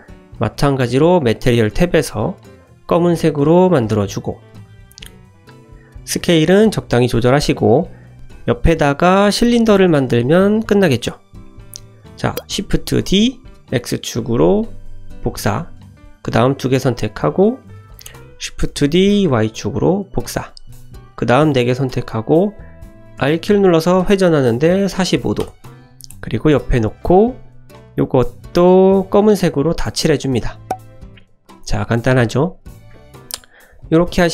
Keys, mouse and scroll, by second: 1.2 click, 1.8 click, 2.6 click, 4.3 click, 4.9 shift+middle click, 5.5 click, 5.9 s, 6.7 g, 7.3 shift+middle click, 8.1 ctrl+z, 8.3 shift+a, 9.7 s, 11.2 scroll up 2, 11.4 shift+middle drag, 12.6 shift+d, 16.2 drag, 16.6 click, 16.9 shift+click, 17.4 click, 17.8 shift+click, 18.7 shift+d, 21.1 shift+click, 21.6 shift+click, 23.1 r, 28.0-29.1 drag, 30.6 shift+middle click, 31.4 click, 31.6 scroll down 2, 31.8 shift+middle click, 32.2-32.8 middle drag, 33.1 click, 33.7 shift+click, 34.0 shift+click.